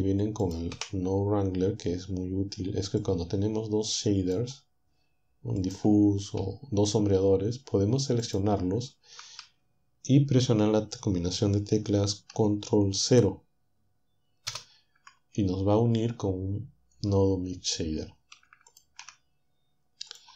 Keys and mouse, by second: 0.8 Delete, 3.2-4.6 drag, 5.6 click, 8.2-9.6 shift+drag, 14.5 ctrl+0, 18.8 ctrl+shift+click, 20.1 click.